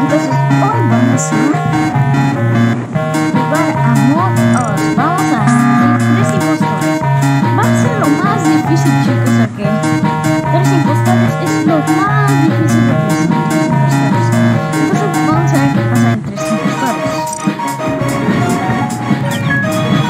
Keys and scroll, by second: 2.7 space, 16.1 space.